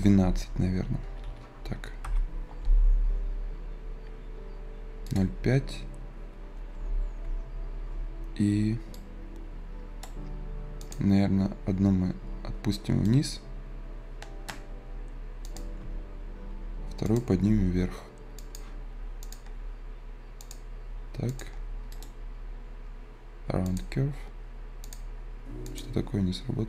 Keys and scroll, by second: 12.6 Return.